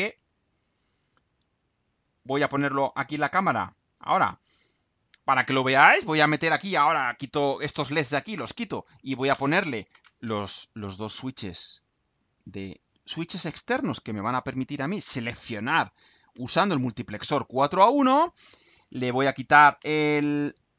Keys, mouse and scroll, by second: 0.1 click, 3.0 click.